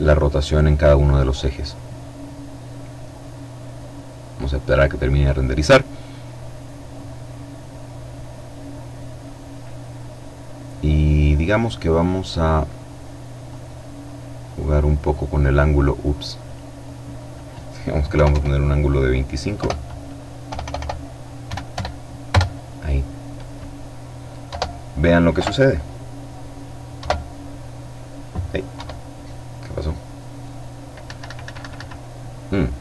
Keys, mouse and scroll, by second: 1.3-1.8 scroll up 1, 6.4-6.9 scroll down 1, 7.3-7.8 scroll down 1, 8.5-9.0 scroll up 1, 9.9-10.5 scroll up 1, 10.5-12.4 middle drag, 12.4-16.1 drag, 17.1 KP_2, 17.3 KP_5, 18.6 BackSpace, 19.5 BackSpace, 20.5 KP_2, 20.7 KP_5, 23.5 F12, 24.3 ], 26.0 F12, 27.7 F12, 30.0 Escape.